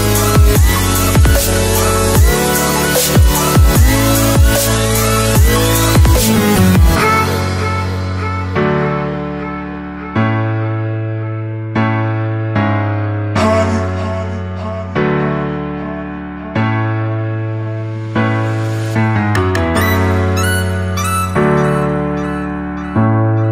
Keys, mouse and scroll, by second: 4.2 right click, 6.4 click, 7.9-8.5 scroll up 4, 8.5 scroll down 1, 8.8 scroll up 1, 9.0 click, 11.0-12.5 typing, 13.5 click, 16.0 shift+d, 16.8 click, 19.7 Left, 20.2 click, 20.9 Right, 21.7 click.